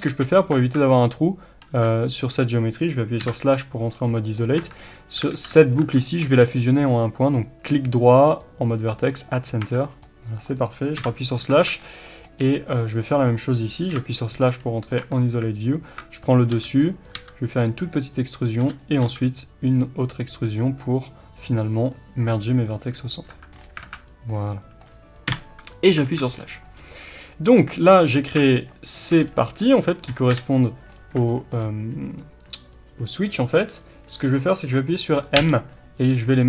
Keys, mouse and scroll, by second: 0.2 alt+a, 0.6 alt+click, 1.7 Tab, 3.2 KP_Divide, 3.9 scroll down 1, 4.1-5.6 middle drag, 4.6 Tab, 4.8-5.3 scroll up 1, 5.3 alt+a, 5.6 alt+click, 6.0 shift+middle click, 6.7-10.0 right drag, 9.6-10.0 scroll down 2, 9.6 Tab, 10.0-12.7 middle drag, 10.9 KP_Divide, 11.5 alt+a, 11.7 scroll down 1, 12.4-12.7 scroll up 1, 12.7 click, 13.9 KP_Divide, 14.5-15.7 middle drag, 15.0 Tab, 15.7 alt+click, 16.5 e, 16.8 click, 17.2 s, 17.8 click, 18.6 e, 18.7 click, 19.0 s, 19.7 click, 20.0-23.9 right drag, 23.3 Tab, 23.5-23.8 scroll down 1, 23.8 alt+a, 23.9-24.3 middle drag, 24.4-28.0 middle drag, 25.2 KP_Divide, 26.0 alt+a, 26.2-27.0 scroll down 2, 28.0 click, 28.6 shift+click, 28.9 shift+click, 29.2 scroll down 2, 29.3-36.4 middle drag, 30.3 KP_1, 30.9-31.3 scroll up 1.